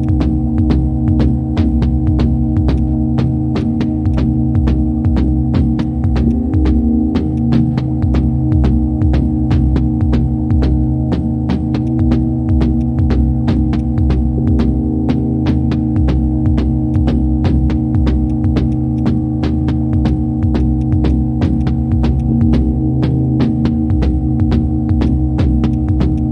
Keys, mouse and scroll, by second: 5.8 ctrl+shift+click, 6.3 ctrl+shift+click, 8.1 ctrl+shift+click, 8.8 ctrl+shift+space, 11.5 shift+space, 21.4 right click, 24.7 ctrl+z, 25.1 ctrl+click.